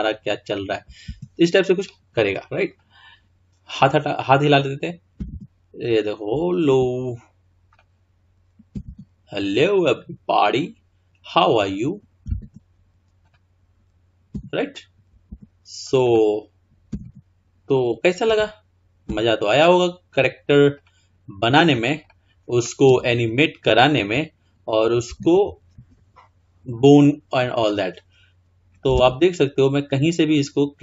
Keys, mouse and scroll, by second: 2.8 click, 4.2 click, 5.2 r, 7.7 click, 8.8 r, 13.3 click, 14.4 r, 15.9 click, 17.0 r, 19.1 r, 21.5-22.1 drag, 22.9 r, 27.6 click, 29.0 r.